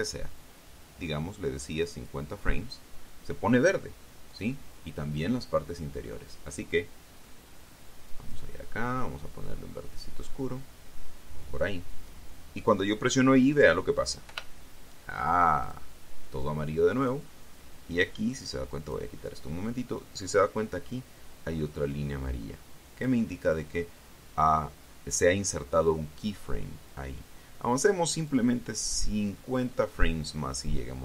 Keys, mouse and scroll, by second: 5.1 click, 8.9 click, 10.4-11.0 scroll down 1, 11.1 scroll down 1, 15.1 i, 16.5 click, 17.9 click, 19.3 click, 22.6-24.1 drag, 29.1-30.6 drag.